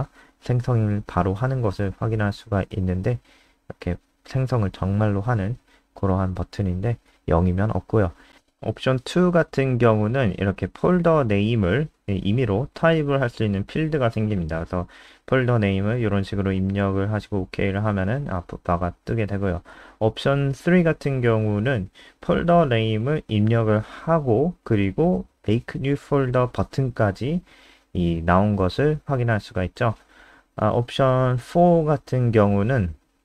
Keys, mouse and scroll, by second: 2.0 F3, 2.0 click, 3.6 click, 5.3 ctrl+w, 5.9 click, 6.5 BackSpace, 7.2 2, 7.6 ctrl+s, 8.0 F5, 9.7 scroll down 3, 10.4 click, 11.3-11.6 scroll down 5, 12.3-16.8 typing, 17.5 click, 18.7 BackSpace, 19.8 3, 20.3 ctrl+s, 20.7 F5, 23.4 click, 31.1 BackSpace.